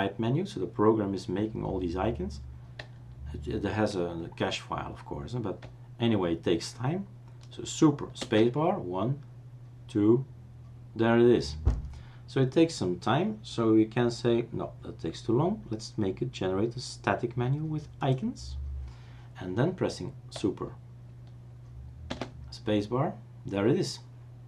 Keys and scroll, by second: 8.2 super+space, 22.1 super+space.